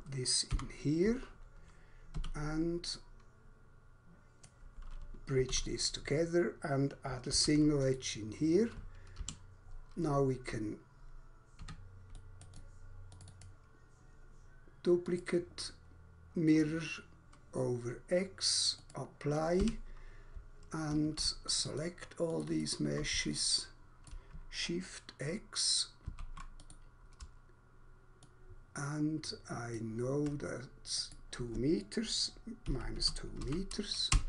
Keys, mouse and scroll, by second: 0.5 Delete, 2.1 2, 3.0 click, 4.5 click, 5.5 alt+q, 5.6 click, 7.3 alt+c, 7.8 click, 9.1 Escape, 9.6 scroll down 1, 10.0-10.3 scroll up 1, 11.6 3, 12.1 click, 12.5 click, 12.6 click, 13.3 click, 15.1 click, 16.5 click, 18.6 click, 19.6 Escape, 21.5 shift+click, 21.8 shift+double click, 22.3 shift+click, 22.6 shift+double click, 23.3 shift+double click, 26.1 shift+x, 26.6 click, 28.3 ctrl+click, 32.4-33.6 typing, 34.0 Return.